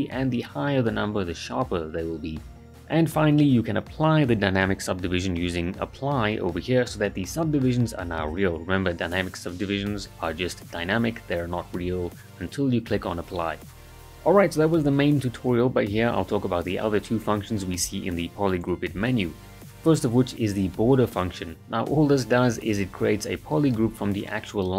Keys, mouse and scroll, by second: 0.2-0.8 drag, 4.4 alt+right click, 4.8 click, 5.9 alt+a, 10.5 ctrl+z, 12.5-16.9 ctrl+right drag, 20.0-21.1 alt+right click, 22.4 click.